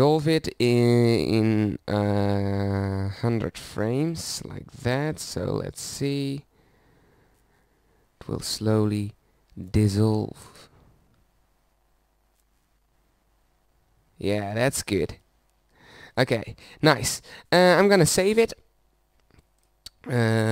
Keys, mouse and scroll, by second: 5.8 KP_0, 17.7 click, 18.1 middle click.